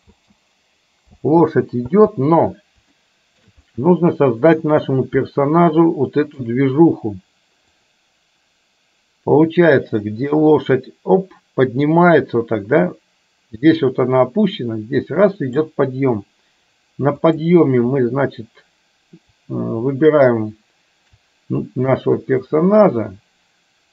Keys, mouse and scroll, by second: 0.1 space, 1.2 space, 2.0 space, 3.1-3.6 shift+middle drag, 3.7-4.6 middle drag, 5.3-6.5 shift+middle drag, 7.8-15.8 drag, 17.2 click, 22.0 click, 22.2-23.9 drag.